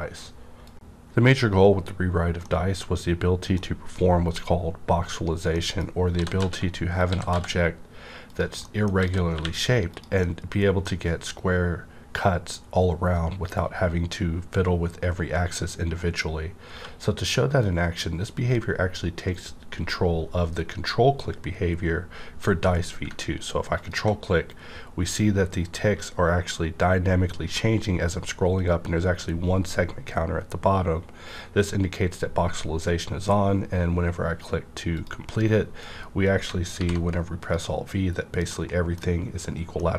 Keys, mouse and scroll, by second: 5.0 Return, 5.0 click, 5.1 scroll down 1, 5.5 middle click, 5.7 scroll down 1, 6.1-7.3 typing, 7.0 click, 8.2 click, 8.6 middle click, 8.9-9.3 typing, 9.9 click, 10.2 middle click, 10.2-13.4 middle drag, 10.2 click, 16.7-19.0 middle drag, 16.7 click, 16.7 q, 23.1 middle click, 23.1 q, 23.7 ctrl+click, 24.6 scroll up 1, 31.1-32.3 scroll down 1, 32.3-33.0 scroll up 1, 33.0-33.5 scroll down 1, 34.4-34.9 scroll up 1, 34.9 click, 36.8 alt+v, 37.4 click, 38.5 scroll up 1, 38.7-39.9 middle drag.